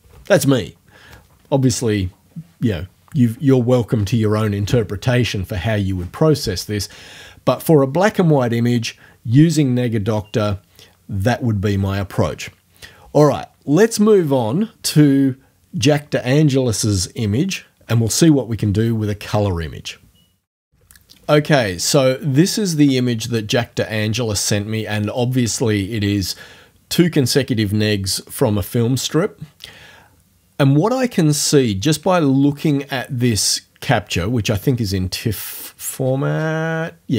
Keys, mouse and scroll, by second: 34.5 click, 36.0 scroll down 2.